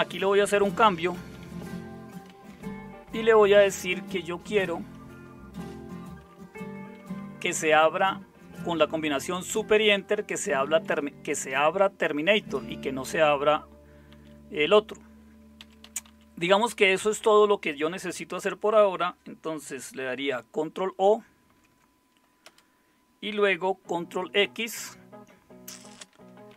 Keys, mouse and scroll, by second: 0.4-3.7 typing, 4.1 Delete, 4.4 Delete, 4.8 Delete, 5.2 Delete, 5.6 Delete, 6.8-8.2 typing, 9.7-11.2 typing, 14.1 Down, 15.6 Down, 15.8 Down, 16.1 Down, 21.5 ctrl+o, 22.5 Return, 24.6 ctrl+x, 26.2-26.5 typing.